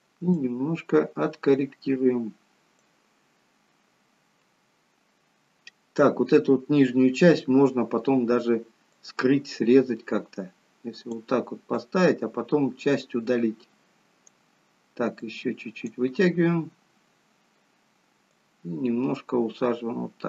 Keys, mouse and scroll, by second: 0.3 click, 8.8 click, 11.7 click, 15.2 click.